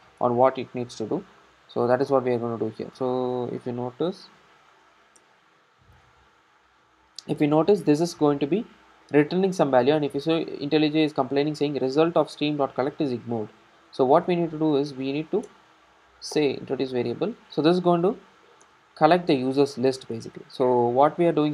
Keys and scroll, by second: 0.2 super+b, 0.2 super+e, 5.2 alt+Return, 15.6 alt+Return, 18.7 Return, 21.1 super+c.